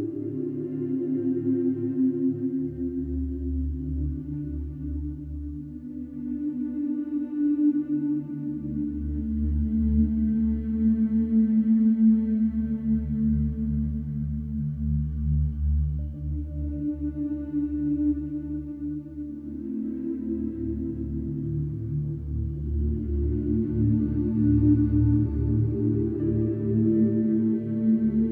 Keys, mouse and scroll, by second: 2.9 alt+click, 3.8 g, 6.2 ctrl+b, 7.6 alt+click, 9.0 g, 12.6 alt+click, 13.2 g, 15.4 ctrl+b, 16.5 Tab, 17.0-18.5 right drag, 18.5-20.1 middle drag, 20.8 ctrl+2, 21.5 click, 21.8 scroll down 2, 22.3-23.2 middle drag, 23.2 click, 23.8 scroll down 2, 24.3-25.0 middle drag, 25.0 click, 25.6 click, 26.1 click, 26.9 click.